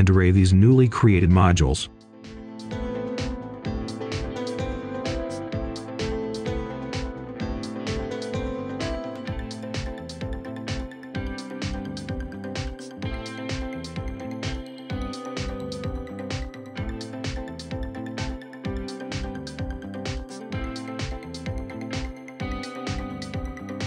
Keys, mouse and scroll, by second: 1.1 scroll up 1, 1.4 click, 2.2 shift+click, 2.8 shift+click, 3.0 click, 3.7 Tab, 3.9-5.0 scroll up 1, 5.2 typing, 6.3 Return, 8.2 1, 8.4 Return, 9.4 4, 9.9 Return, 12.1 click, 12.5-16.3 scroll down 1, 16.3-18.6 scroll up 1, 18.6 click, 18.9-19.3 scroll down 1, 20.1 right click, 20.5 Return, 20.6 click, 22.4 scroll down 1, 22.7-23.8 right drag.